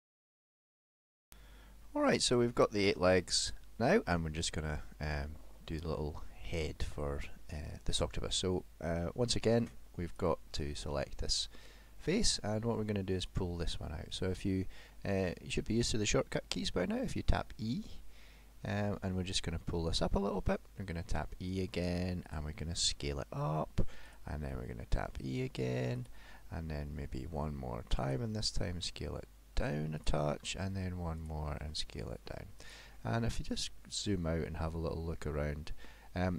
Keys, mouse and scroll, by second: 1.9 middle click, 2.3-3.3 scroll down 3, 3.3 middle click, 5.7 middle click, 10.1 click, 11.1-11.6 scroll up 5, 11.7 middle click, 14.9 middle click, 16.1 middle click, 17.0 e, 21.2 e, 23.0 s, 24.5 e, 27.4 e, 28.9 s, 30.4 e, 31.8 s, 32.9 scroll down 6, 33.4 middle click, 34.1-34.5 scroll up 4, 34.5 middle click.